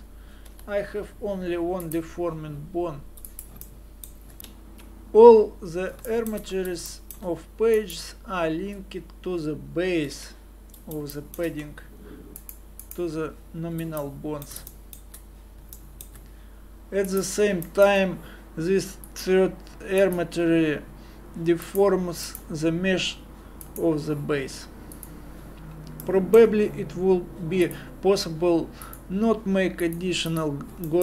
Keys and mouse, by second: 0.5 g, 3.2-4.4 middle drag, 6.1 click, 7.8-10.1 drag, 10.1 KP_Divide, 14.7-20.4 drag, 25.7-30.9 drag, 30.9-31.0 middle drag.